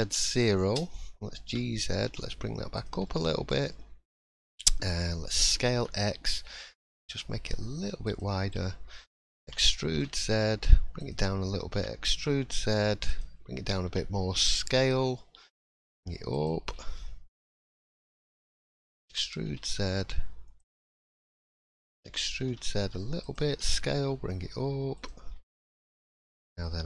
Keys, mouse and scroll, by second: 3.0 middle click, 3.7 shift+middle click, 4.1 scroll up 2, 4.3 middle click, 4.3-5.0 scroll down 1, 5.4 s, 8.4 middle click, 9.4 e, 16.6 scroll down 6, 16.9 middle click, 18.0-18.3 scroll up 2, 19.1-19.6 scroll up 1, 19.1 e, 20.9 middle click, 22.1 e, 23.5 s, 25.3-25.6 scroll down 3, 25.5 middle click, 26.2-26.5 scroll up 3, 26.6 shift+middle click.